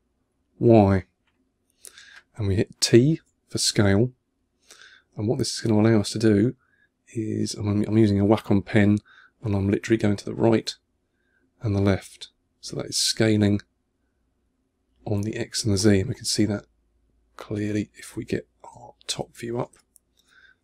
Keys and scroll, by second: 3.0 t, 18.6 o, 19.6 2.